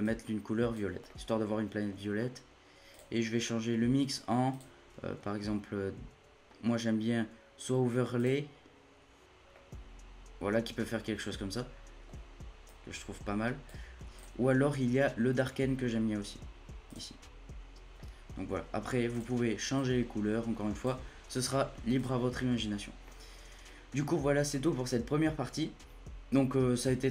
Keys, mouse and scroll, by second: 1.1-2.9 middle drag, 2.9-8.1 drag, 9.5-10.8 middle drag, 10.8-11.1 scroll up 1, 11.1 scroll down 1, 11.2-12.7 middle drag, 12.7-17.1 drag, 17.9-19.1 middle drag, 19.1-22.3 drag, 22.3 scroll down 10, 23.1-24.3 middle drag, 24.3 scroll down 1, 24.5-27.1 middle drag.